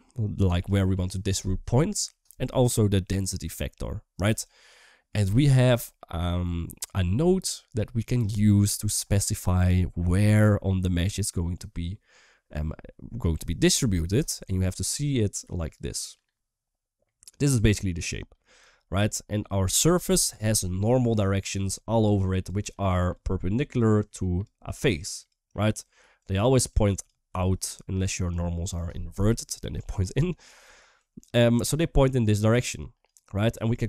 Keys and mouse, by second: 4.4-4.8 middle drag, 5.9 middle click, 13.5 KP_1, 14.3 shift+middle click, 15.4-18.2 drag, 15.4 d, 18.2 d, 18.4 shift+middle drag, 20.7 click, 20.7-28.1 typing, 21.9 click, 22.4 click, 23.3 click, 23.7 click, 24.7 click, 25.2 click, 25.9 click, 26.4 click, 27.3 click, 27.7 click, 30.7 drag, 30.7-33.8 typing, 31.3 drag, 32.0 drag, 32.5 click, 33.3 click, 33.7-33.8 drag.